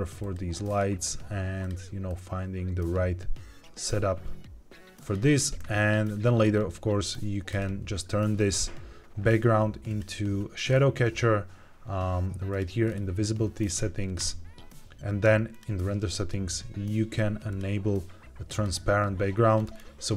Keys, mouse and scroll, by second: 0.1 click, 0.6 click, 1.5 click, 6.3-7.4 scroll up 2, 7.4 click, 8.2-9.4 scroll down 2, 9.8 click, 10.5 scroll down 2, 11.4-12.4 scroll down 1, 12.4 click, 12.7-13.7 scroll down 2, 14.1 click, 15.4 click, 17.4 click, 18.4 click, 19.5-20.1 scroll up 2.